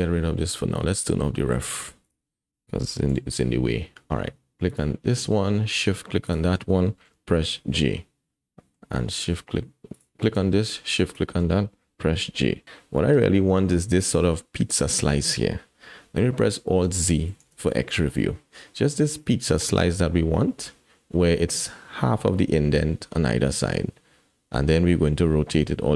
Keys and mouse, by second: 2.0 click, 3.1 KP_7, 4.7 click, 6.2 shift+click, 7.3 j, 8.0 click, 9.9 click, 12.2 j, 12.6 KP_1, 12.6 KP_7, 17.4 alt+z, 17.9 shift+middle click.